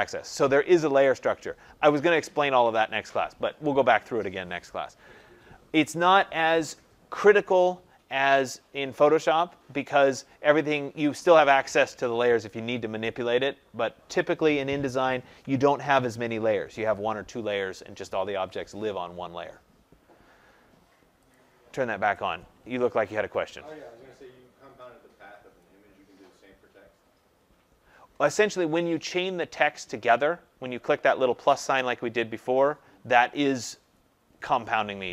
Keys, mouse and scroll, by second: 21.3 click.